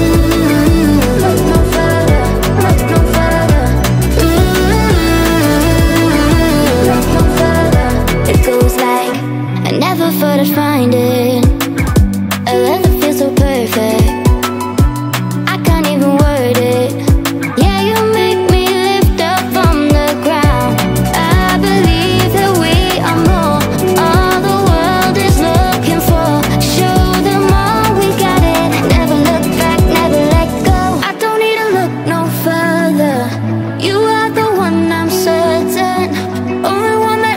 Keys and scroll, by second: 32.2 Down.